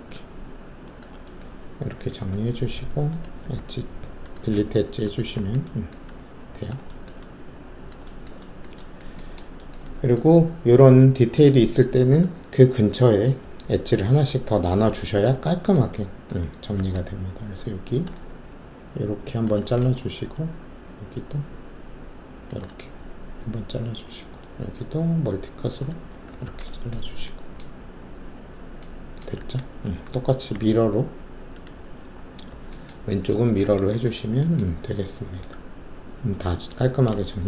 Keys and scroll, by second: 2.0 w, 2.8 alt+2, 3.5 alt+q, 4.5 alt+q, 5.3 alt+q, 14.8 alt+shift+3, 16.7 alt+s, 26.3 shift+w, 27.8 alt+`, 29.4 w, 30.5 ctrl+e, 33.6 alt+w, 37.2 alt+shift+q.